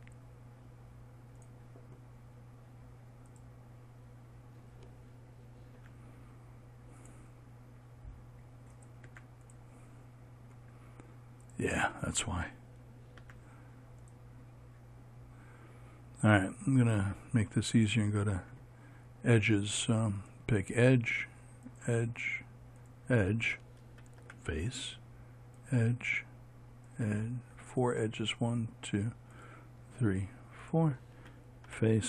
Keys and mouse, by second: 3.8-7.7 right drag, 7.7 x, 9.3-14.7 right drag, 10.1 x, 20.7-32.0 right drag, 24.8 f.